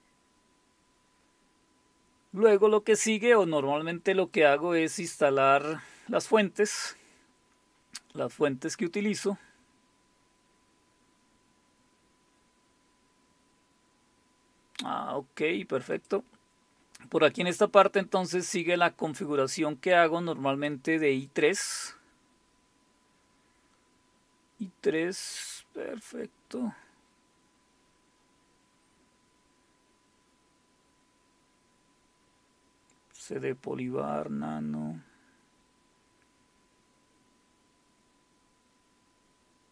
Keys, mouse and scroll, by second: 0.0-1.2 scroll down 2, 1.2-3.2 scroll down 1, 5.2-7.2 drag, 9.2-10.5 scroll down 2, 10.5-13.2 scroll down 1, 15.9 click, 17.6-20.7 drag, 21.3 click, 22.3-22.9 scroll down 1, 22.9-23.7 scroll up 1, 24.6-25.3 scroll down 2, 27.0-29.0 scroll down 2, 29.0-31.2 scroll down 1, 32.1-32.9 scroll down 2, 32.9-33.6 scroll down 1, 33.6-35.1 scroll down 1, 35.1-36.2 scroll down 1, 37.3-39.2 scroll down 2.